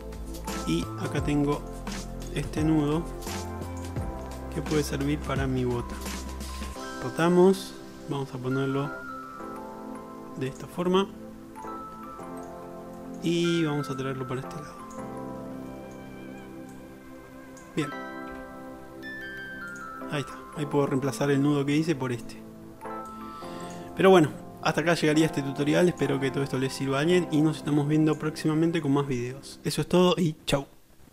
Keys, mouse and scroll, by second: 3.0-10.8 drag, 6.6 r, 10.8-14.1 ctrl+middle drag, 14.1-15.3 drag, 15.3-15.9 middle drag, 15.9-17.3 shift+drag, 18.5 s, 19.3 middle click, 19.9-20.7 shift+drag, 20.7-23.2 middle drag, 23.2-25.2 drag, 26.2 middle drag, 26.5 click, 26.8-27.1 drag, 28.7-29.3 middle drag, 29.6 click.